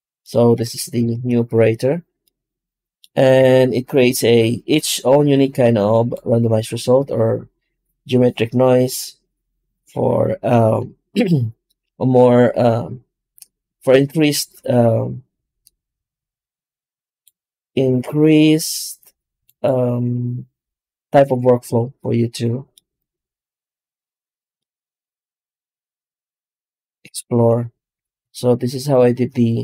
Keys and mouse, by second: 3.2 F9, 22.9-25.9 right drag, 25.9-27.2 middle drag, 27.2 Tab, 28.1 3, 28.7-29.6 right drag.